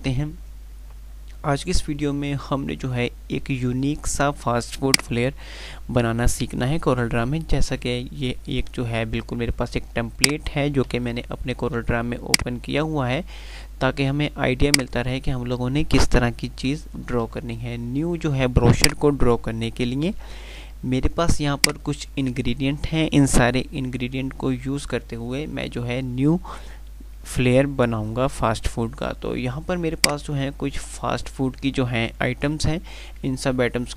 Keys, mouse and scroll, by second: 5.1 click, 10.2 click, 11.1 F3, 14.7 click, 14.9-16.8 F2, 21.7 click, 22.0-23.4 F2, 28.4 F2.